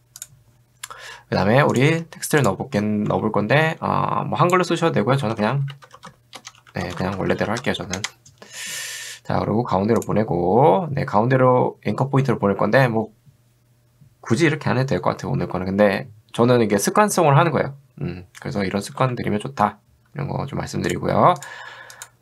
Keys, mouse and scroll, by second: 1.7 click, 2.4 click, 3.7 BackSpace, 5.0-8.1 typing, 10.0 click, 19.1 v, 20.9 click, 21.4 click.